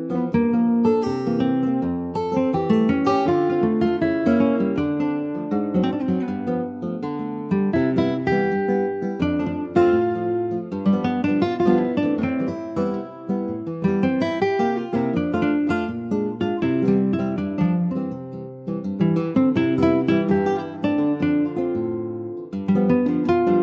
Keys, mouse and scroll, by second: 1.4-2.8 drag, 2.8 ctrl+z, 3.0 click, 3.3 click, 3.8 alt+middle click, 4.5 ctrl+s, 4.9 click, 6.2 click, 8.2 ctrl+s, 8.5 alt+middle click, 9.0 alt+z, 9.3-9.7 scroll up 3, 9.7 alt+middle click, 10.2 alt+z, 10.4 scroll up 2, 10.8 shift+middle click, 11.5 scroll up 2, 11.5 s, 13.0 alt+middle click, 13.8 s, 15.0 click, 16.0 shift+click, 16.7 /, 17.2 scroll down 1, 17.4 alt+middle click, 17.9 click, 18.3 scroll up 2, 18.5 click, 18.9 shift+middle click, 19.1-19.5 shift+scroll up 1, 19.5 click, 21.2 scroll up 2, 21.4 shift+middle click, 22.4 click.